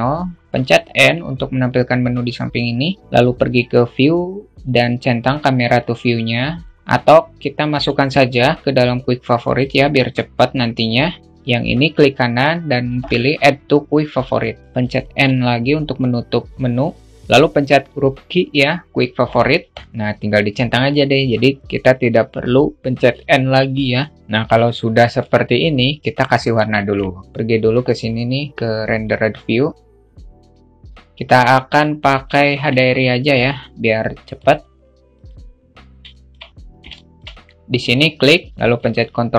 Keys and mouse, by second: 1.0 n, 3.0 click, 5.2 click, 6.0 click, 14.7 n, 17.2 g, 17.3 q, 19.6 g, 22.8 n, 24.2 q.